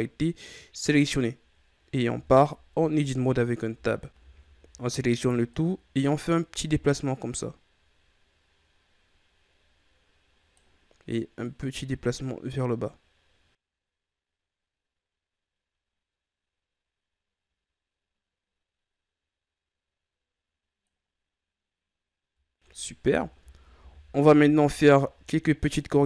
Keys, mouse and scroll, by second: 2.0 KP_1, 2.7 Tab, 3.7 a, 4.1 a, 5.4-8.4 drag, 11.4-14.4 drag, 21.0-22.6 scroll down 3, 22.6-23.2 scroll up 3, 23.2 Tab, 23.4 ctrl+scroll up 1, 23.7 a, 24.5-24.8 shift+scroll down 2, 24.8-25.5 middle drag, 25.5-26.0 scroll up 6.